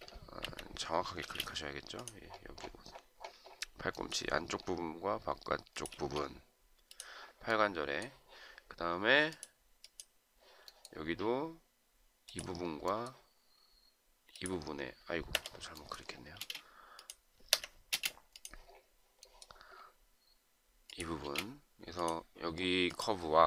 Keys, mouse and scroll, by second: 0.5 Escape, 1.3 space, 6.0 space, 15.3 Escape, 16.4 space, 17.6 Escape, 17.9 space, 21.2 space.